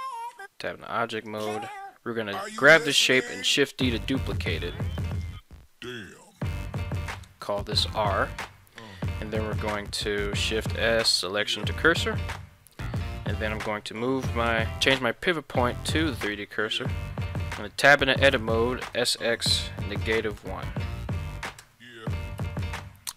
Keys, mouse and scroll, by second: 0.0 Tab, 1.1 right click, 3.3 shift+d, 3.8 right click, 5.0-8.2 drag, 6.0 BackSpace, 6.4 BackSpace, 10.4 shift+s, 17.4 Tab, 18.9 s, 19.1 x, 20.0 -, 20.3 1, 21.6 Return, 22.4 Tab.